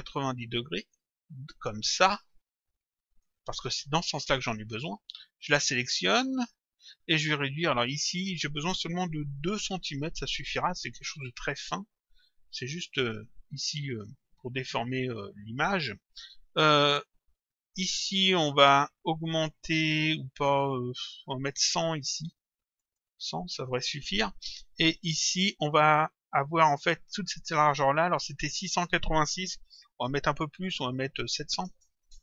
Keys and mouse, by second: 0.7 click, 1.9 shift+click, 5.9 click, 8.0 click, 9.8 Return, 12.9 click, 17.6 click, 18.9 click, 21.9 click, 23.0 click, 25.0 click, 32.0 Return.